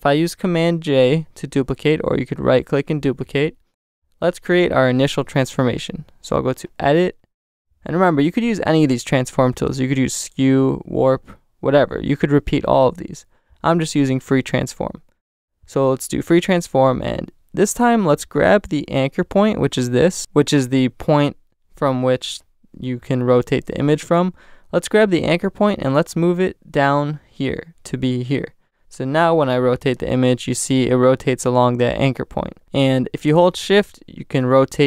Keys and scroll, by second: 0.9 super+j.